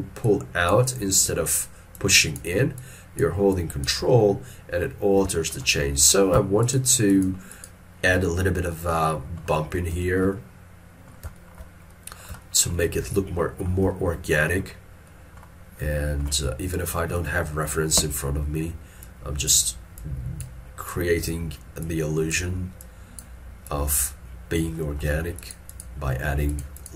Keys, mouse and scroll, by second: 0.3 ctrl+click, 1.2 ctrl+click, 2.0 ctrl+click, 2.8 ctrl+click, 3.6 ctrl+click, 4.2 middle click, 5.7 shift+middle click, 6.7 shift+click, 7.1 shift+click, 7.6 shift+click, 8.5 middle click, 10.1 shift+middle click, 10.4 shift+middle click, 11.4 shift+middle click, 13.2 ctrl+middle click, 14.0 shift+middle click, 16.7 ctrl+middle click, 19.1 ctrl+click, 20.0 ctrl+click, 21.0 ctrl+click, 21.9 ctrl+click, 22.8 ctrl+click, 23.7 ctrl+click, 24.8 middle click, 26.5 shift+click.